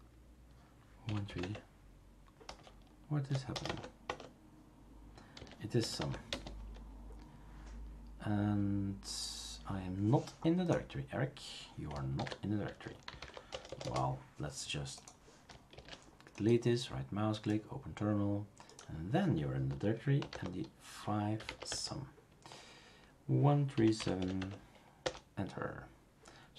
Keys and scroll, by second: 1.0-3.6 typing, 3.6 Tab, 4.0 Tab, 5.1-6.4 typing, 12.1 ctrl+c, 12.8-13.8 typing, 15.7 shift+super+q, 20.0-22.0 typing, 23.7-24.7 typing, 25.0 Return.